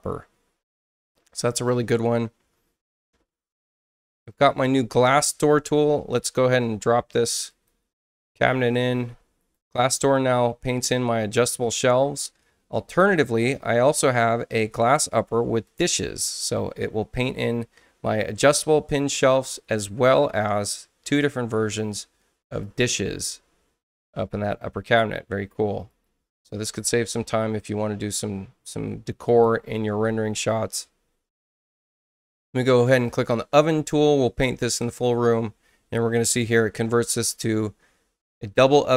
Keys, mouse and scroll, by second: 3.6 click, 7.5 click, 9.4 click, 10.1 click, 14.4 click, 15.7 click, 21.0 click, 22.6 click, 25.3 space, 25.9 click, 29.3 click, 33.1 click, 34.6 click.